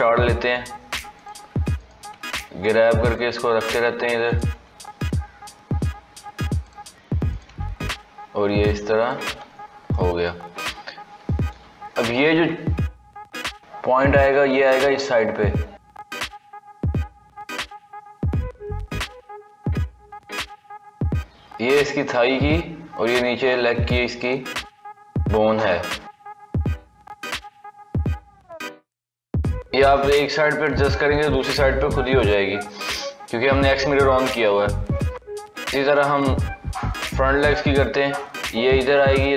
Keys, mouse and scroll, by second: 0.2 g, 1.6 click, 2.0 g, 3.3-4.2 scroll down 1, 4.2 click, 4.4 g, 7.2 click, 7.3 g, 9.4 scroll up 3, 9.8 shift+middle click, 10.7-11.1 scroll up 1, 11.1 shift+middle click, 11.8 click, 13.0 g, 15.0 click, 15.3 g, 17.5 click, 17.8 g, 19.5 click, 19.8 g, 24.1 click, 24.7 g, 26.6 KP_1, 27.8 KP_3, 28.9-31.9 middle drag, 31.9 KP_3, 32.5-33.0 scroll down 3, 33.0-34.4 shift+middle drag, 34.4 scroll up 4, 34.9 shift+middle click, 35.4-35.7 scroll down 1, 35.7-36.7 shift+middle drag, 36.7 click, 37.9 g.